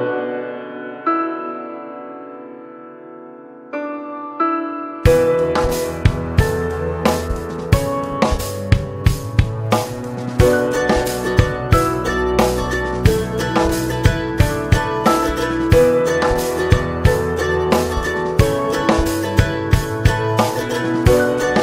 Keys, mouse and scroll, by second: 0.0-2.0 right drag, 2.0 middle click, 2.9-8.2 drag, 8.2 alt+middle click, 8.5 alt+middle click, 9.0 ctrl+s, 9.2 click, 9.5 middle click, 9.8-10.6 scroll up 2, 10.0 shift+middle click, 10.6 Tab, 13.3-16.1 drag, 16.1 middle click, 16.2 scroll up 1, 16.4 shift+middle click, 16.8 click, 16.8 Tab, 17.1 click, 17.3 middle click, 18.3 click, 19.0 click, 19.2 middle click, 19.8 ctrl+s, 20.1 click, 21.1 ctrl+1.